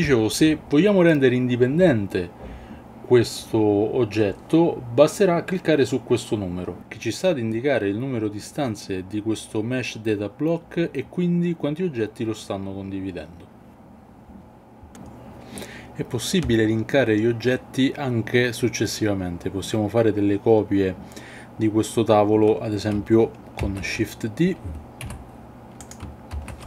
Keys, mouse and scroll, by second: 13.1 click, 13.3 Tab, 13.4-14.6 typing, 14.0 Tab, 14.2 Tab, 23.6 shift+d, 25.0 y, 26.4 shift+d.